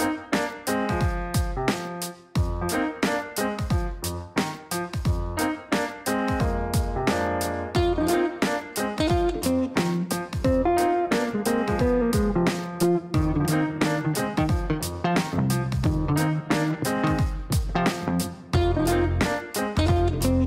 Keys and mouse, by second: 1.4 click, 2.7 click, 3.8 click, 7.3 click, 9.1 click, 13.6 click, 14.9 click, 17.7 click, 19.7 click.